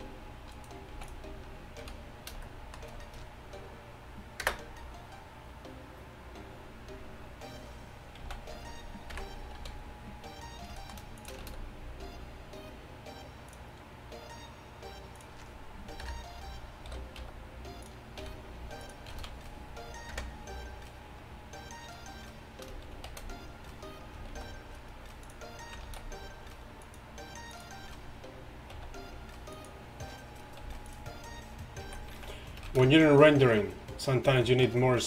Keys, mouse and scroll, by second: 0.6-1.5 right drag, 1.0 x, 1.9 a, 4.5 KP_0, 8.3 z, 9.2 KP_1, 9.6 a, 11.2-12.8 drag, 11.5 shift+a, 16.1 KP_3, 17.3-20.2 typing, 23.1 shift+a, 24.4 shift+s, 26.0 shift+a, 28.8 s, 30.8 s, 32.0 z, 32.2 z, 33.4 shift+z.